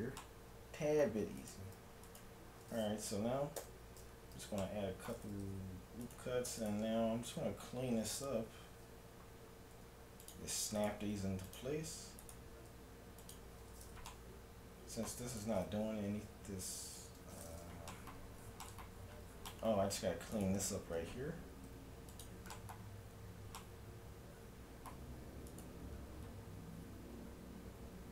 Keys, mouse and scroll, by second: 1.4-3.9 right drag, 3.7 j, 4.4 a, 4.6-6.8 middle drag, 6.0-8.4 right drag, 9.7 g, 10.8-14.0 right drag, 11.1 g, 12.7 g, 13.8-15.7 middle drag, 15.3-17.2 right drag, 17.4-21.3 middle drag, 20.4-22.2 right drag, 21.7 g, 22.6-25.4 middle drag, 25.5-27.3 right drag, 27.1 g, 27.4-28.1 middle drag.